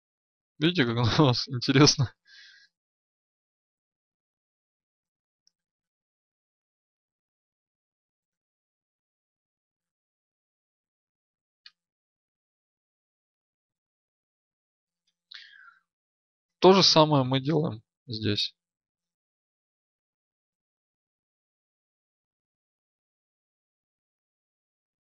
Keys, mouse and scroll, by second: 2.5 ctrl+r, 6.5 ctrl+r, 10.2 ctrl+r, 12.7 Escape, 16.1 Tab, 17.2 right click, 19.7 Tab, 20.6 ctrl+r, 24.0 ctrl+r.